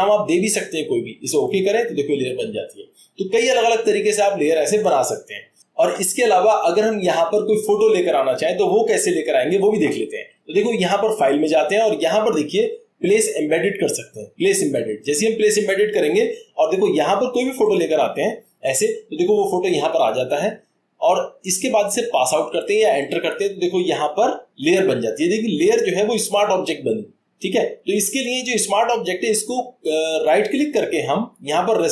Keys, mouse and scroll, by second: 2.1 click, 18.4 click, 23.0 click.